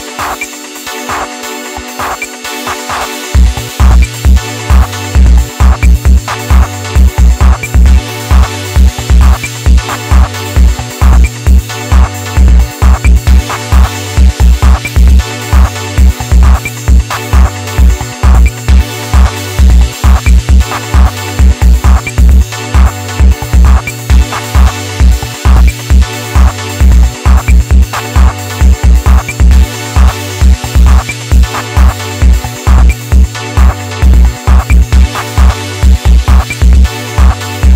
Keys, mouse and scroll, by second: 1.1 middle click, 1.9 KP_1, 2.8-4.7 shift+middle drag, 4.7 Tab, 5.2-6.6 middle drag, 6.6 KP_1, 6.8-7.2 scroll down 2, 7.2-7.7 shift+middle drag, 7.7-8.0 scroll up 1, 8.0 Tab, 9.0 click, 9.9 ctrl+shift+click, 19.1 right click, 21.7-24.8 right drag, 24.8 scroll down 2, 25.1-26.4 middle drag, 26.4-26.8 scroll up 2, 26.8 KP_3, 27.5 shift+middle click, 27.9 scroll up 1, 28.7 r, 30.0 KP_1, 32.3-33.5 middle drag, 33.5 e, 34.8 middle click, 35.6 e.